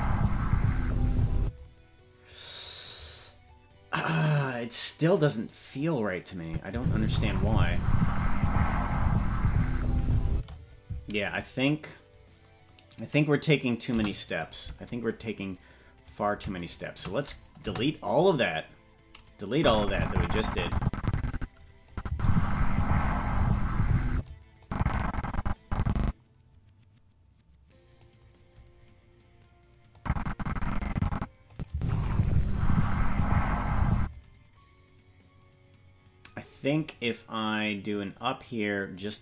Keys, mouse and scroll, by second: 1.4 space, 6.4 click, 6.7 space, 10.3 space, 13.9 Delete, 16.1-17.6 right drag, 17.6 Delete, 19.5-21.3 drag, 21.9-24.2 drag, 22.1 space, 24.1 space, 24.6-28.0 drag, 30.0-31.3 drag, 31.5 click, 31.7 space, 34.0 space, 37.9-39.0 drag.